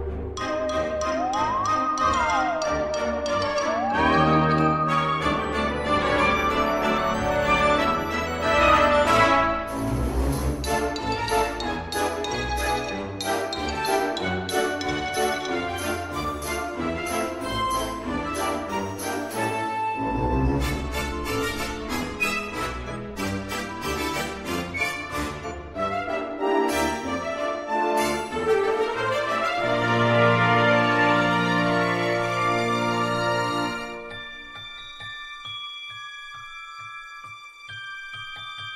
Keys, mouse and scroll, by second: 0.0 click, 0.3 click, 0.4 click, 0.5 click, 0.7-8.9 typing, 0.9 middle click, 1.2 click, 1.5 click, 1.7 click, 1.8 click, 2.1 click, 2.3 click, 2.6 click, 2.8 click, 3.3 click, 3.4 click, 3.8 click, 4.0 click, 4.4 click, 5.1 click, 5.7 click, 5.9 click, 6.0 click, 6.2 click, 6.3 click, 6.8 click, 6.9 click, 7.2 click, 7.3 click, 7.7 click, 8.0 click, 8.2 click, 8.4 click, 8.6 click, 8.8 click, 9.1 click, 9.3 middle click, 9.7 click, 10.3 click, 10.3 g, 10.7 click, 10.9 g, 10.9 click, 11.0 click, 11.4 click, 11.5 g, 11.8 click, 11.8 g, 12.1 click, 12.9 click, 13.1 g, 13.5 click, 13.5 n, 14.1 click, 14.2 click, 14.4 click, 14.6 click, 14.9-27.2 typing, 15.0 click, 15.2 click, 15.9 click, 16.1 click, 16.2 click, 16.6 click, 16.7 click, 17.1 middle click, 17.3 middle click, 17.7 middle click, 18.0 middle click, 18.1 scroll, 18.3 click, 18.8 click, 19.0 click, 19.1 click, 19.3 click, 19.6 click, 19.8 click, 20.1 click, 20.3 click, 20.6 click, 20.7 click, 20.8 click, 21.4 click, 21.5 click, 21.7 click, 22.1 click, 22.2 click, 22.6 click, 22.8 click, 23.0 click, 23.2 click, 23.9 click, 24.4 click, 24.6 click, 25.1 click, 25.3 click, 25.8 click, 25.8 click, 26.3 click, 26.4 click, 26.5 click, 27.0 click, 27.0 click, 27.5 scroll, 27.8 scroll up 4, 27.8 shift+middle click, 28.4 click, 28.5 click, 28.6-31.4 typing, 28.8 click, 29.3 click, 29.5 click, 29.9 click, 30.0 click, 30.1 click, 30.7 click, 31.2 click, 31.3 click, 31.7 click, 32.2 click, 32.3 click, 32.5 ctrl+r, 32.6 middle click, 32.8 middle click, 32.8 click, 32.9 click, 33.5 click, 33.8-36.4 typing, 34.0 click, 34.1 click, 34.4 click, 34.5 click, 34.7 click, 34.9 click, 35.2 click, 35.6 click, 35.9 click, 36.3 click, 36.8 click, 37.1 click, 37.3 click, 37.5 ctrl+r, 37.6 scroll, 37.9 click, 37.9 click, 38.2 ctrl+r, 38.2 click, 38.3 scroll, 38.6 click, 38.6 click.